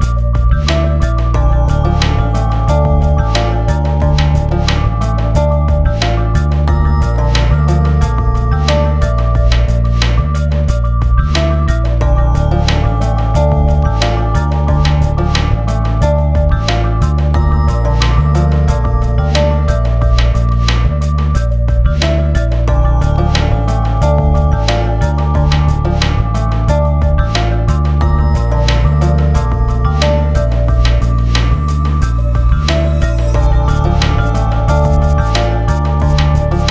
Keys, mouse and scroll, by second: 8.3 ctrl+space, 9.1 right click, 10.2-12.9 drag, 13.2 e, 13.6 shift+click, 14.2 shift+Page_Up, 15.1 shift+click, 15.3 e, 15.7-18.7 shift+drag, 18.7-23.7 drag, 23.7 shift+right click, 24.4 click, 25.8 ctrl+space, 27.3-31.5 drag, 32.4 right click, 33.0 click, 34.4 shift+Page_Down, 34.8 ctrl+Page_Up, 36.5 shift+click.